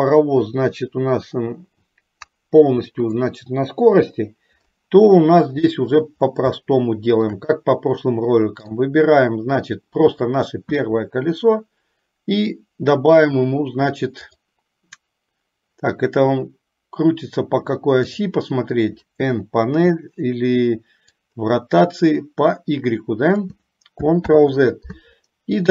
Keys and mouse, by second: 2.5-3.3 drag, 4.1 Delete, 5.7 click, 6.8 shift+middle click, 8.7 click, 18.4 click, 21.2-23.9 drag.